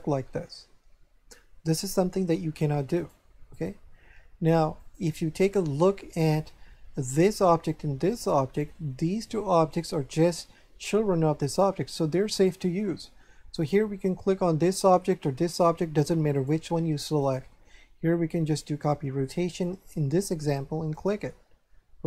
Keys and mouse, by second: 3.0 right click, 4.8 click, 5.7 shift+middle click, 7.1 right click, 13.5 right click, 15.4 right click, 17.2 click, 18.5 click, 19.7 click, 20.9 click.